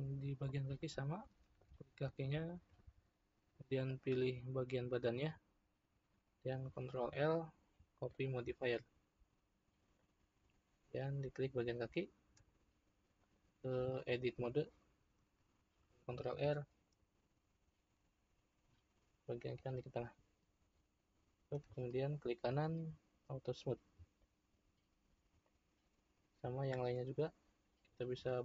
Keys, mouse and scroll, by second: 1.6 click, 3.8 shift+click, 6.9 ctrl+l, 9.8 click, 13.2-16.3 drag, 16.3 ctrl+r, 21.4 Tab, 22.1-24.2 right drag, 24.2-26.6 shift+middle drag, 26.6 click.